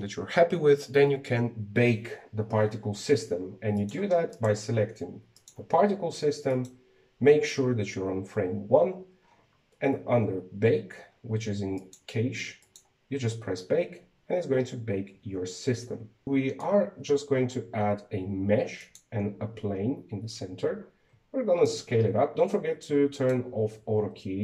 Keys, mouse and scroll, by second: 4.5 click, 5.1 right click, 6.1 click, 7.3 click, 9.7-10.0 scroll down 1, 10.0-10.6 scroll up 6, 10.6-12.6 scroll down 5, 12.6 click, 13.4-16.2 drag, 16.2 KP_1, 17.0-17.8 middle drag, 17.8 shift+a, 21.4 s, 23.9 click.